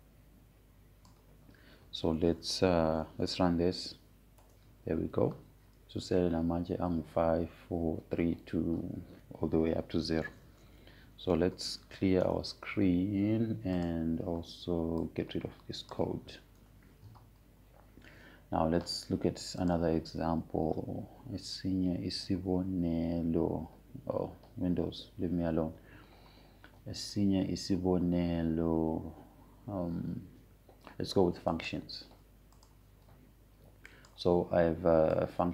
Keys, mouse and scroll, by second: 1.5-5.4 drag, 5.4 Up, 6.1 Return, 12.9-13.9 typing, 14.0 Return, 15.6-18.2 drag, 18.2 BackSpace, 21.3 click, 33.2 right click, 34.2 click.